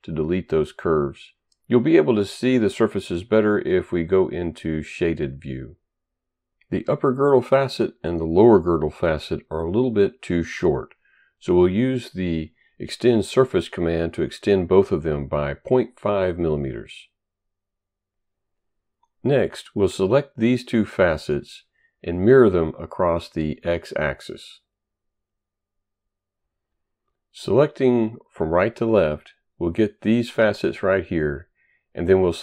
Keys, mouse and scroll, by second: 1.6 Delete, 3.2 click, 4.3 click, 5.5 shift+right click, 9.1 click, 11.1 click, 12.0-13.2 typing, 13.5 Return, 13.5 click, 15.5 Return, 16.6 click, 17.5 Return, 19.2 click, 19.7 shift+click, 22.8 click, 24.8 click, 26.0 click, 26.3 right click, 28.6 click, 31.4 right click, 32.2 shift+click.